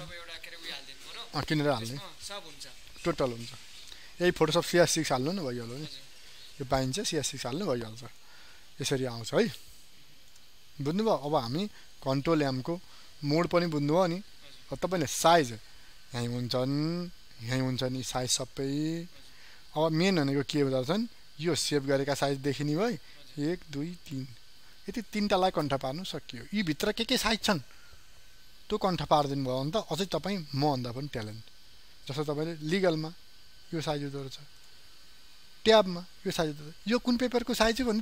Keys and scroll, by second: 11.9 ctrl+n.